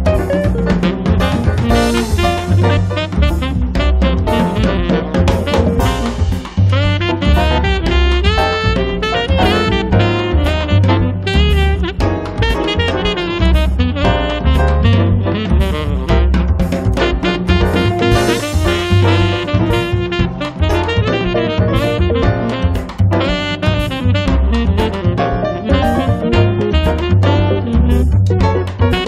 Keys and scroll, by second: 0.5 space, 4.8 m, 6.3 Up, 9.8 Up, 11.2 Up, 13.6 space, 19.0 m, 20.4 ctrl+z, 20.8 space, 22.1 m.